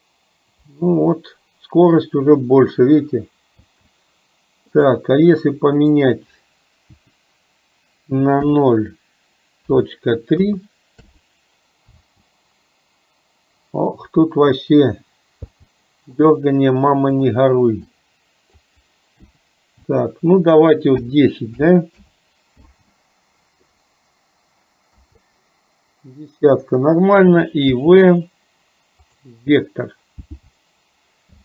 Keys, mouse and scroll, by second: 4.9-11.2 drag, 16.3-22.1 drag.